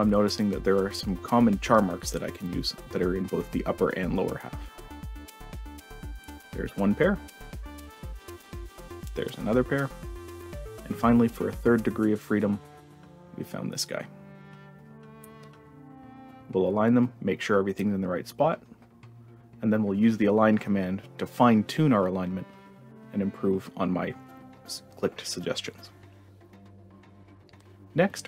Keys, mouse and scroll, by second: 1.2 click, 1.8 click, 2.8 click, 3.2 click, 4.4 click, 5.2 click, 5.7-6.1 drag, 6.4-7.9 drag, 8.3 click, 8.8 click, 9.2 click, 9.8-12.2 drag, 12.9 click, 13.2 click, 14.8 click, 15.9 click, 16.7-18.9 drag, 19.4 click, 24.3 click, 24.9-25.3 drag, 26.3 click, 27.3 click.